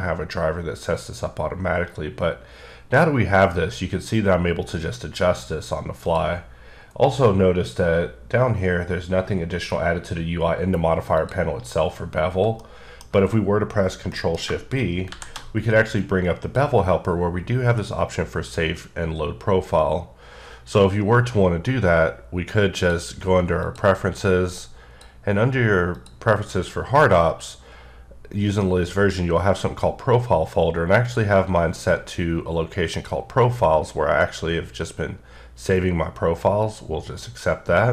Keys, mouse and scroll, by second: 0.3-2.0 ctrl+drag, 6.8-7.4 scroll down 4, 10.2-11.2 scroll up 4, 11.2 click, 12.6 middle click, 14.2 middle click, 15.1 shift+b, 15.9 click, 22.8 click, 23.7 click, 24.5 click, 26.0 click, 26.5-28.8 scroll down 4, 28.8-29.2 scroll down 2, 33.0 click, 36.6 click.